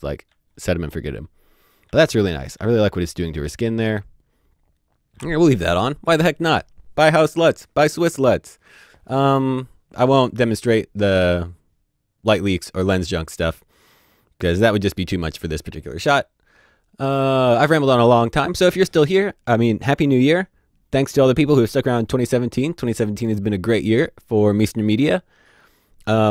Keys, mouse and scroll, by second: 0.3 typing, 1.8 ctrl+d, 2.6 typing.